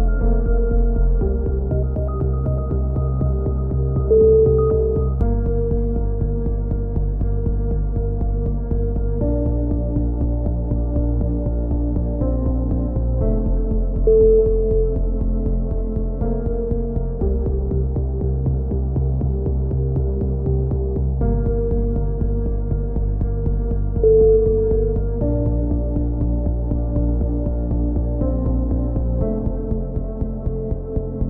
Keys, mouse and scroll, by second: 0.2 Tab, 0.4-1.4 middle drag, 1.1 z, 1.4-2.5 drag, 4.8 KP_3, 5.3 middle click, 5.5-6.6 drag, 6.6 middle click, 7.6-8.7 middle drag, 8.7 c, 12.1 middle click, 12.8 KP_1, 13.7 click, 17.3 KP_3, 18.2 click, 18.8 click, 19.3 click, 21.7 c, 23.1 right click, 23.4 middle click, 23.7 click, 24.4 click, 27.1 c, 27.7 right click, 28.6 click, 29.5-30.8 middle drag, 30.8 click.